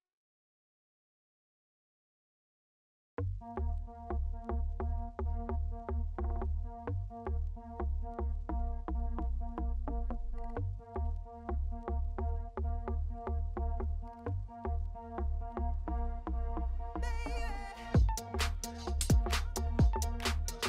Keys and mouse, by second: 4.3 ctrl+s, 8.6-10.8 shift+drag, 12.1 ctrl+s, 12.8 click, 15.4-16.8 drag, 18.1-19.6 drag, 18.9 0, 19.0 0.